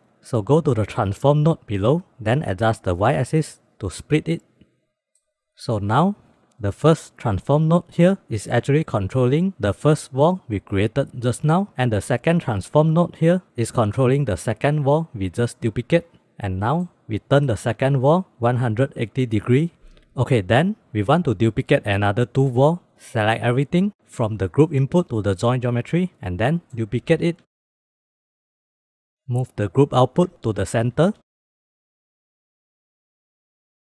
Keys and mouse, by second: 0.8 middle drag, 3.1-4.2 drag, 4.7-5.2 middle drag, 5.9 middle click, 6.7-8.2 drag, 11.8-12.8 drag, 16.4 middle click, 17.3 middle click, 18.4-19.8 drag, 21.7 middle drag, 22.7 middle click, 22.8-25.4 drag, 26.5 middle click, 26.8 shift+d, 28.1 click, 28.7 g, 28.8 click, 29.1-29.6 drag, 29.8 g, 31.2 click, 31.2 g, 31.9-32.2 drag, 32.9 drag, 33.7-33.9 drag.